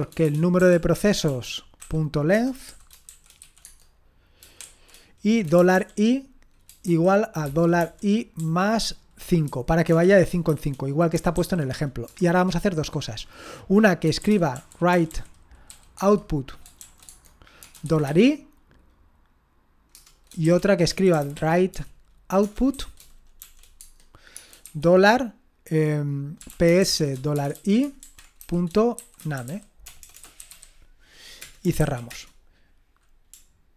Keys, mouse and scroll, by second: 0.0-12.0 typing, 14.0-15.7 typing, 16.0 Tab, 16.8-18.5 typing, 17.1 Tab, 19.9 Return, 20.2-32.6 typing, 31.4 Return.